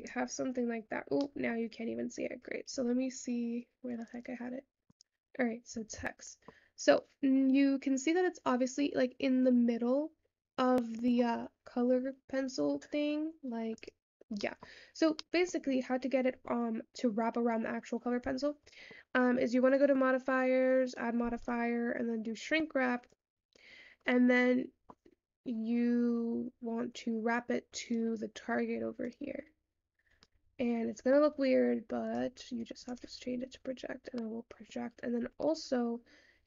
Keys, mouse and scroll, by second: 0.1 click, 2.2-3.6 middle drag, 3.6-5.8 scroll down 10, 5.8-9.4 scroll up 3, 9.4-11.1 scroll up 1, 11.1-16.2 scroll up 1, 16.2-33.5 scroll up 1, 33.5 click.